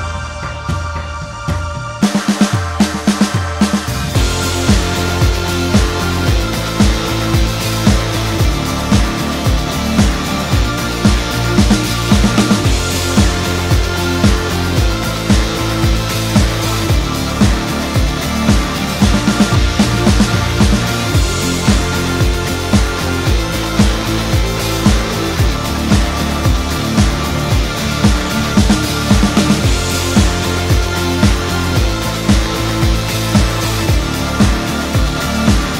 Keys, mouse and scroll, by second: 0.5 0, 0.6 ., 0.9 2, 1.1 Return, 1.7-2.0 scroll down 1, 2.2 middle click, 5.4-5.8 scroll up 2, 7.4 middle click, 9.7 m, 10.3 m, 11.0 l, 13.4 ctrl+click, 19.0-20.5 scroll down 7, 20.5-22.0 scroll up 18, 24.2-26.2 scroll up 10, 28.9-29.3 scroll up 2.